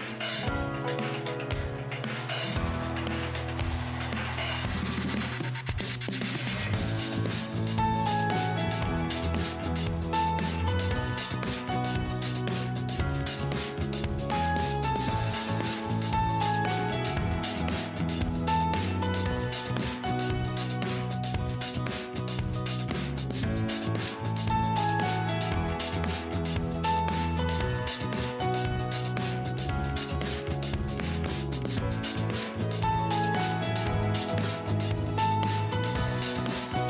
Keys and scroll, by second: 31.9 ctrl+z.